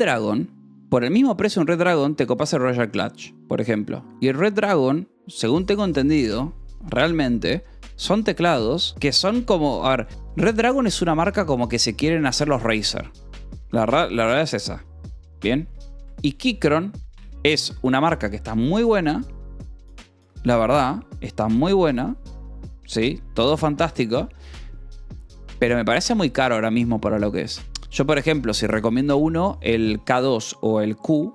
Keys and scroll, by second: 0.0-0.8 typing, 0.8 Return, 14.1-18.9 typing, 20.4 BackSpace, 20.6 Down, 20.8 Return.